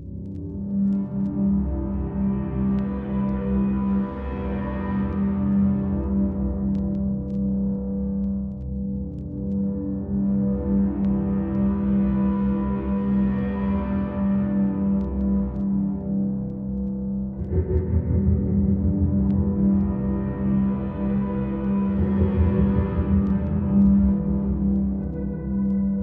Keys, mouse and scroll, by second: 1.0 click, 2.2 click, 4.3-6.3 drag, 7.7-17.4 drag, 18.5-18.9 middle drag, 19.4-20.5 middle drag, 20.9-24.3 drag, 25.6 click.